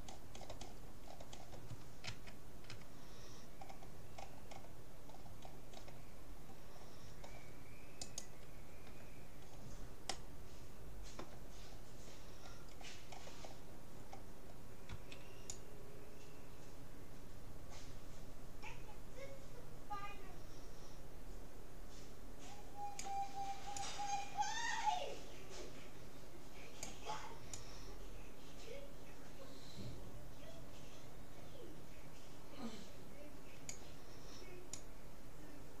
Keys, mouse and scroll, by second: 2.1 a, 2.7 a, 8.1-9.7 right drag, 10.1-11.9 middle drag, 12.7-15.7 middle drag, 14.9 c.